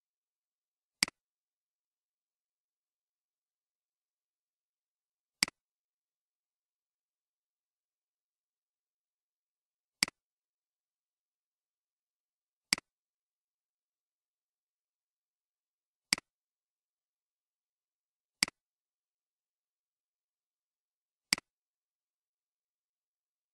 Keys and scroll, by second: 6.3-6.8 typing, 10.4-11.2 typing, 13.6-15.9 typing, 19.4 typing.